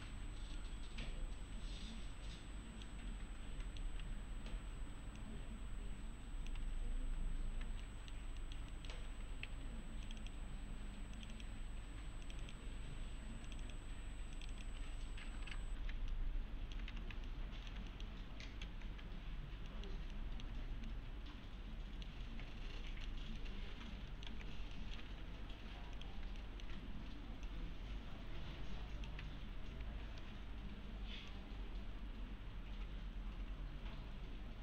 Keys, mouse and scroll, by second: 0.0 1, 0.6-3.1 middle click, 4.0 1, 4.5-4.9 scroll up 1, 5.2-6.7 click, 6.6 1, 7.4 scroll down 1, 7.8 alt+middle click, 8.7 alt+middle click, 9.0 alt+scroll down 2, 9.5 2, 12.2 click, 16.1-16.8 alt+middle click, 16.9 2, 17.3-17.9 alt+middle click, 18.6 alt+x, 19.7 middle click, 20.1 alt+middle click, 20.7 scroll down 1, 20.9-22.1 middle click, 22.6-22.9 scroll up 1, 22.9 middle click, 23.1 scroll down 1, 23.4-24.3 alt+middle click, 24.3 x, 24.7 alt+middle click, 25.1 2, 26.0 click, 26.4 alt+middle click, 27.5-29.3 click, 29.2 `, 31.3-34.6 click.